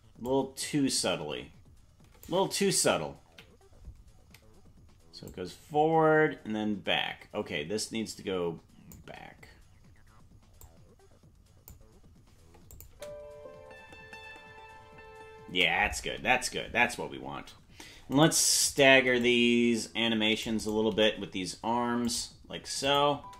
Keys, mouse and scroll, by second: 0.2 click, 3.3 Left, 5.3 click, 9.1 Left, 10.6 click, 12.7 click, 12.9 space, 15.6 space, 18.1 right click, 18.9 c, 20.9 g, 22.8 click, 23.1 space.